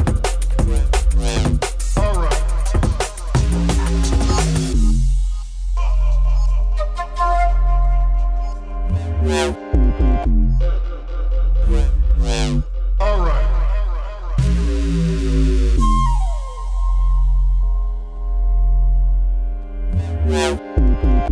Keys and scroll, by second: 4.3 scroll, 5.0 scroll.